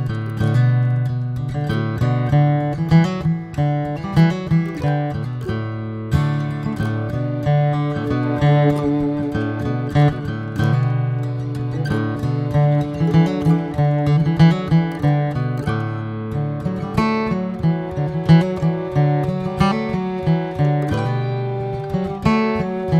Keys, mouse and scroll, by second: 0.2 ctrl+1, 0.8 click, 1.2 ctrl+1, 1.7 ctrl+2, 3.3 ctrl+3, 3.6 drag, 4.0-4.4 middle drag, 4.4 click, 4.7-5.3 right drag, 5.3-5.9 shift+middle drag, 5.9 Tab, 6.6 middle click, 7.5 ctrl+r, 12.0 Tab, 12.1 click, 12.6-13.8 middle drag, 13.8 Tab, 14.1 middle click, 15.0 ctrl+r, 17.7 Tab, 17.9 click, 18.2 scroll down 2, 18.4-21.2 middle drag, 21.2 scroll up 2, 21.5-22.3 shift+middle drag, 22.3 Tab.